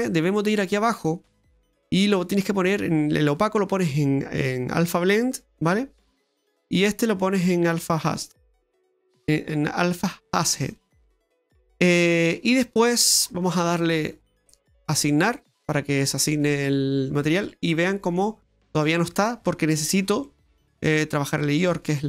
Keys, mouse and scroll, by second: 0.6-1.1 scroll down 3, 1.1-2.4 scroll down 15, 2.4-3.1 scroll down 2, 3.1 click, 6.1 click, 11.2-11.7 scroll down 1, 11.7 middle click, 13.2-15.0 scroll up 18, 15.0 scroll up 1, 15.2 click, 16.6 middle click, 18.5 middle click, 19.4-21.0 scroll up 8, 20.2 middle click, 21.3 click.